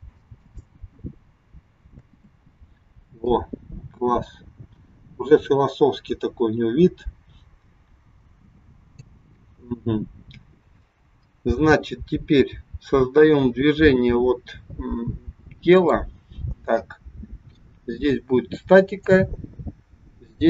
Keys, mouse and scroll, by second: 2.0 space, 3.3 click, 15.8 click, 19.1 click.